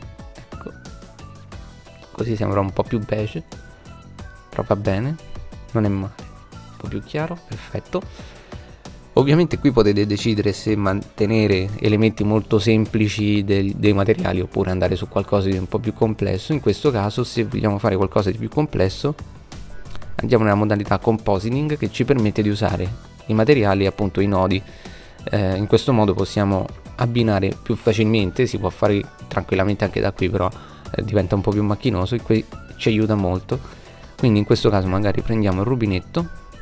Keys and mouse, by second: 14.0 click, 19.3 middle click, 21.2-26.3 middle drag, 31.7 click, 33.4-35.1 drag.